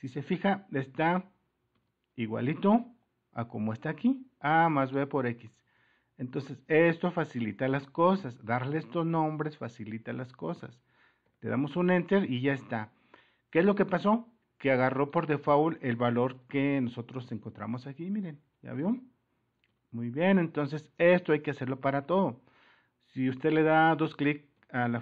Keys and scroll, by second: 1.9 x, 2.4 alt+Tab, 5.6 alt+Tab, 19.9 super+-.